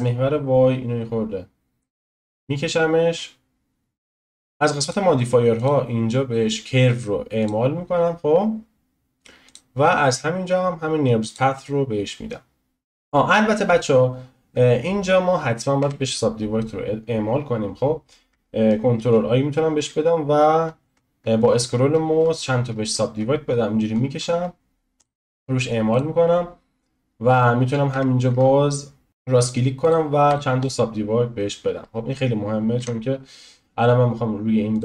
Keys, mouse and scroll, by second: 7.5-12.9 drag, 14.2 scroll up 1, 15.1 scroll up 1, 15.8 Tab, 18.9 ctrl+r, 27.9 Tab, 28.3 Tab, 29.1-32.8 right drag, 32.8 Tab.